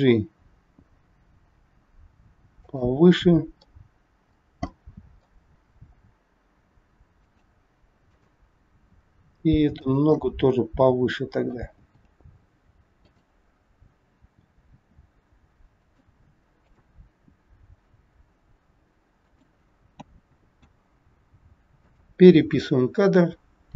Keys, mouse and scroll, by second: 3.6 middle click, 4.8 middle click, 5.6 g, 8.1 click, 8.6 g, 10.1 middle click, 11.7 g, 14.3 g, 16.5 click, 17.3 g, 20.0 a, 20.5 i, 23.1 click.